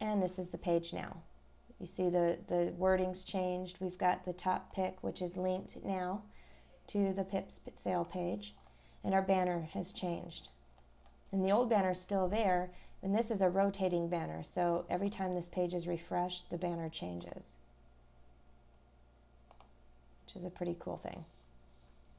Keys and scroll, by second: 8.6 scroll down 1.